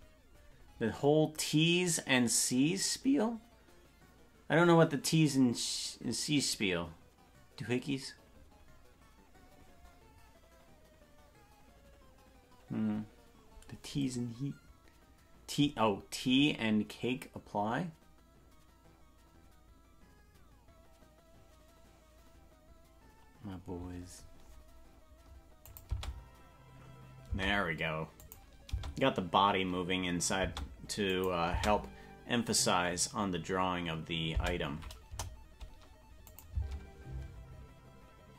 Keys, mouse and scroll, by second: 25.7-26.8 drag, 25.9 space, 27.4 space, 28.2 click, 28.7 space, 30.5 space, 31.1 click, 31.5 space, 34.4 space, 35.1 KP_0, 36.3 click, 36.5 space.